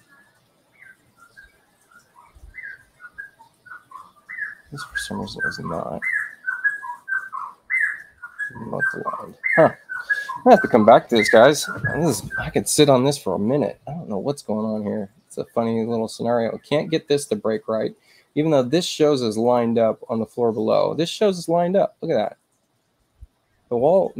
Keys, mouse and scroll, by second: 6.0 shift+i, 6.8 shift+u, 7.4 shift+i, 8.0 shift+u, 9.1 click, 19.4 click, 20.5 click.